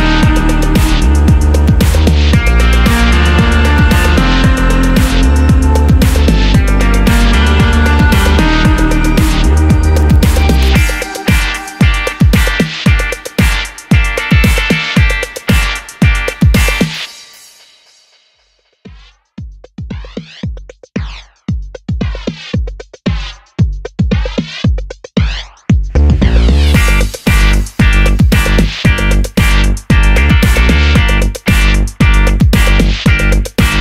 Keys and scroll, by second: 2.2 super+d, 6.2 Down, 6.3 Down, 6.8 Right, 12.3 Down, 12.7 Down, 13.7 Up, 15.4 Left, 32.9 d.